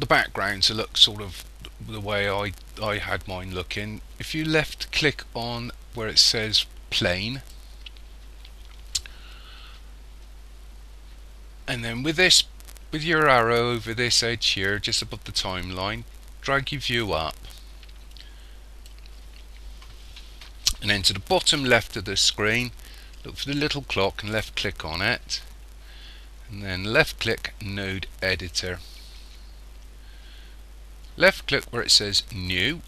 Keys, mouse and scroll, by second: 7.4 click, 15.2 click.